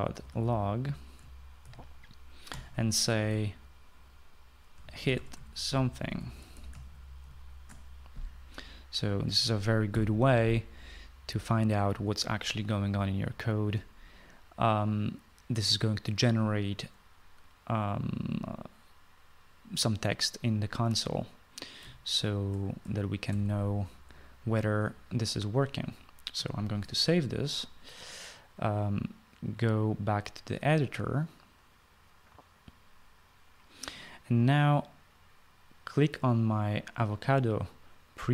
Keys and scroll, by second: 0.0-3.3 typing, 5.3-8.0 typing, 10.7 ;, 24.0 ctrl+s, 27.3 ctrl+s.